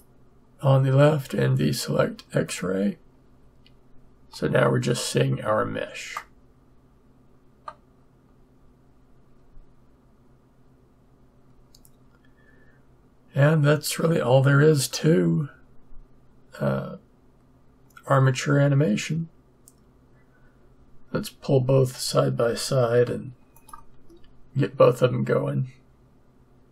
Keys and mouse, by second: 2.4-6.1 drag, 6.1-9.9 middle drag, 23.5-25.3 drag.